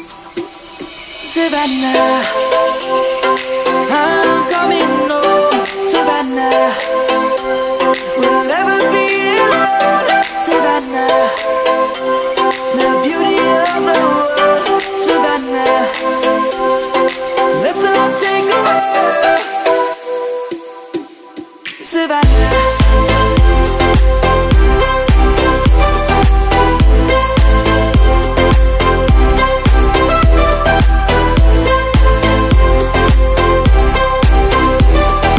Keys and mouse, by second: 0.8 ctrl+b, 4.3 middle click, 5.1 Tab, 5.7 click, 7.7 middle click, 8.4 click, 9.0 click, 9.8 1, 12.1 shift+middle click, 13.6 middle click, 17.9 shift+middle click, 19.8 s, 21.4 click, 22.2 middle click, 23.7 ctrl+z, 24.3 middle click, 26.3 click, 28.2 3, 29.6 click, 31.3 i, 33.8 click, 34.9 middle click.